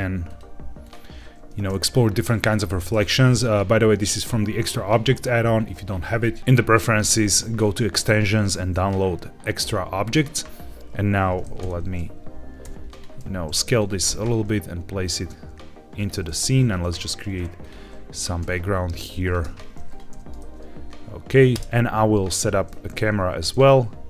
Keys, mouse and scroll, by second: 0.2 click, 0.7 click, 11.5 KP_3, 12.5 g, 12.8 click, 13.1 s, 13.7 click, 13.9 g, 15.9 click, 16.3-16.6 middle drag, 16.6 scroll down 1, 16.7 shift+a, 18.0 Tab, 18.3 s, 19.2 click, 19.3 Tab, 19.8 click, 20.0 g, 20.3 shift+z, 21.5 middle click, 21.5 scroll down 3, 21.5 KP_0, 23.1 q.